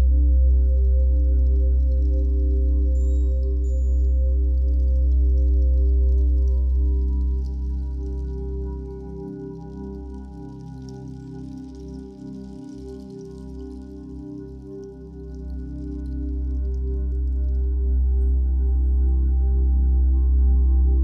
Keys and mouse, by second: 0.9 click, 1.9-4.3 shift+drag, 2.3 Return, 5.0 ctrl+l, 5.0 Return, 5.1 ctrl+i, 7.4 click, 9.1 shift+click, 9.6 l, 10.4 ctrl+l, 11.1 Return, 12.1 click, 13.5 click, 14.0-16.2 drag, 14.0 typing, 16.2-17.4 typing, 18.4 click.